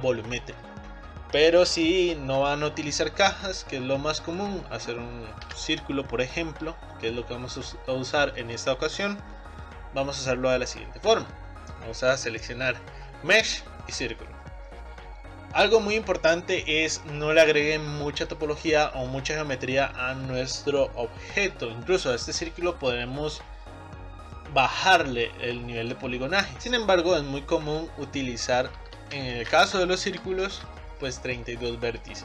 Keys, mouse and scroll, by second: 4.2 click, 5.5 Delete, 7.5-7.9 scroll up 2, 7.9-10.9 middle drag, 11.1 shift+a, 14.1 shift+a, 24.4-26.6 drag, 26.6 shift+a, 27.7-32.2 drag.